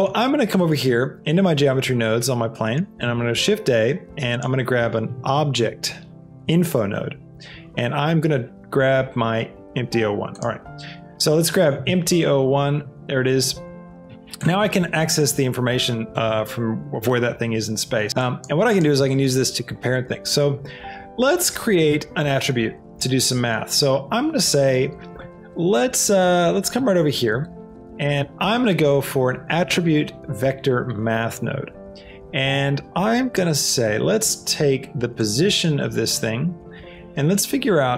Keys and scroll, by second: 2.8 shift+a, 5.0 o, 5.4 b, 5.7 j, 6.5 Return, 11.8 e, 28.3 shift+a.